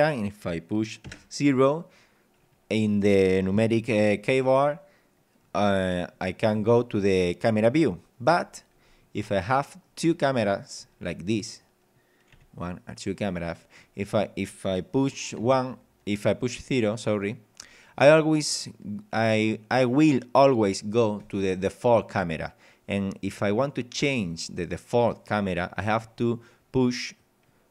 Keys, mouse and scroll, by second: 1.1 KP_0, 2.5 scroll down 2, 2.9 scroll up 2, 5.1 scroll down 2, 5.5 scroll up 2, 6.0 scroll down 2, 8.9-9.3 scroll down 2, 9.3 middle click, 10.1-10.7 scroll down 2, 10.7 middle click, 10.9 scroll up 1, 11.5 right click, 12.3 g, 13.3 click, 13.8 scroll up 1, 15.4 KP_0, 17.6 scroll up 1, 17.9-18.2 scroll down 1, 21.2 right click, 23.3 right click, 27.2 click.